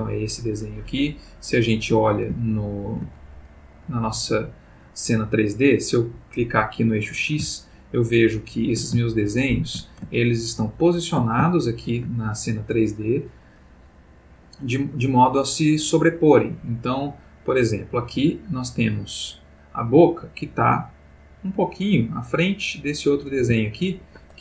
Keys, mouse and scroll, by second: 0.9 Escape, 1.4-1.8 middle drag, 2.3 ctrl+middle click, 2.5-3.2 ctrl+middle drag, 3.8-4.9 middle drag, 4.9-6.0 scroll up 2, 6.5 click, 7.9 ctrl+middle click, 8.3 ctrl+middle click, 9.0-10.0 ctrl+shift+middle drag, 10.1-11.3 ctrl+shift+middle drag, 11.5-12.2 ctrl+shift+middle drag, 18.2-19.6 middle drag, 21.5 click, 22.7 click, 23.4 g, 24.0 Escape.